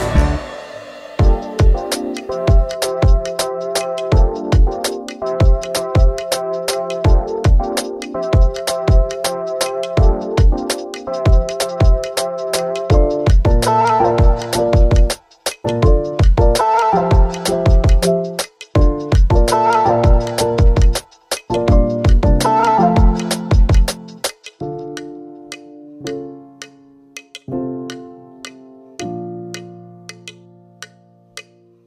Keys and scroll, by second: 20.2 d, 25.2 d.